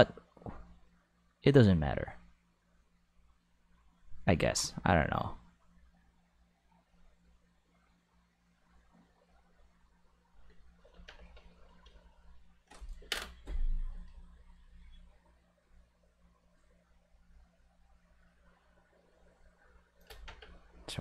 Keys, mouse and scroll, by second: 10.9 Tab, 11.2 right click, 11.8 g, 12.5 right click, 13.9 g, 15.5-16.9 middle drag, 17.1 middle click, 18.0 middle click, 20.0 click, 20.2 Tab, 20.8 Tab.